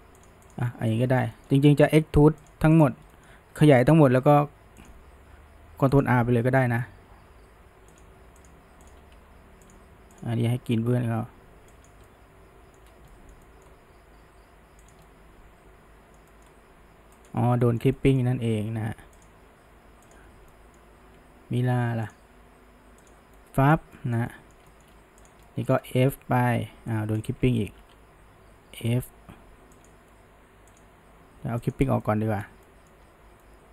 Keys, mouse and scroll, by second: 0.5 drag, 0.7-1.8 middle drag, 1.8 f, 2.8 click, 3.1-4.3 shift+middle drag, 4.3 f, 6.0 click, 6.3 f, 8.4 click, 8.9 click, 9.2 g, 10.2 click, 10.3 g, 12.1-12.9 middle drag, 13.1 middle click, 13.8 g, 15.1-16.7 middle drag, 16.7 g, 17.7-19.2 shift+middle drag, 19.2 drag, 20.5-21.2 middle drag, 21.2 g, 23.1 click, 23.4-25.3 middle drag, 25.3 click, 25.5-26.1 middle drag, 26.1 f, 27.7 ctrl+z, 28.6 f, 30.8 click, 31.7 click, 32.1-33.7 middle drag.